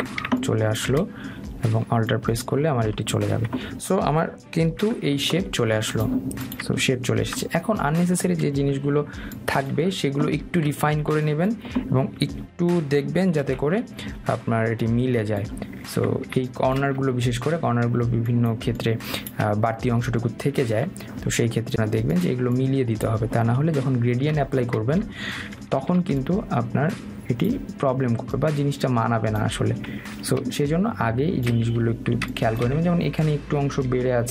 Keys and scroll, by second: 5.7 ctrl+y, 9.6 Delete.